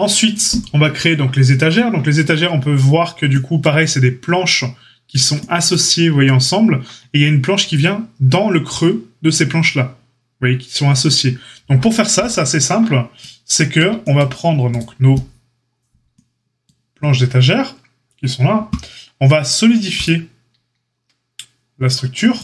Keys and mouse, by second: 14.7-22.4 drag.